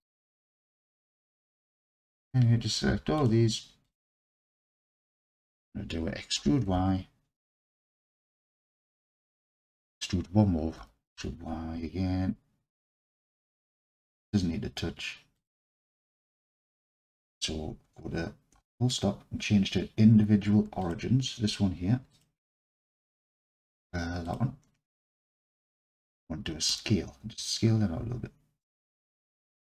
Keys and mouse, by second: 0.7 alt+shift+click, 1.1-2.0 alt+shift+drag, 3.9 alt+shift+click, 4.3-5.3 alt+drag, 6.4 e, 6.7 y, 9.5 shift+click, 10.8 e, 11.2 y, 15.4 shift+click, 16.2-16.8 alt+drag, 16.8 middle click, 22.1-24.5 drag, 25.2 alt+click, 26.7 s, 29.6 shift+click.